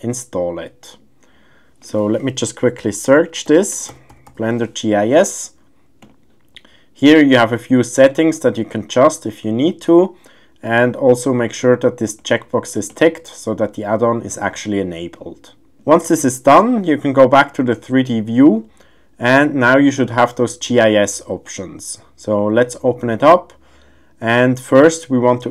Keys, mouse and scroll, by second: 21.4-25.5 drag.